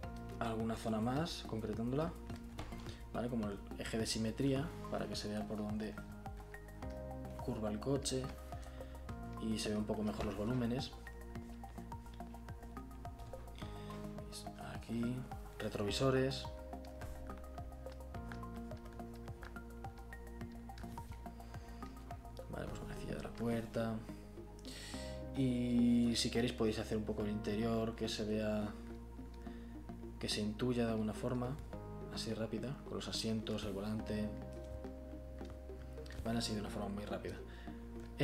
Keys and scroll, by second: 0.7 b.